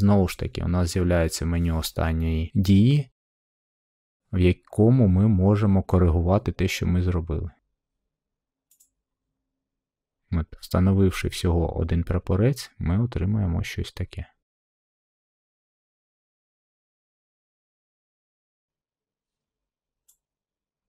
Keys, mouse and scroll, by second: 8.7 click, 12.1 middle click, 12.2 middle click, 12.5 scroll, 17.3 middle click, 18.0 middle click, 18.5 middle click.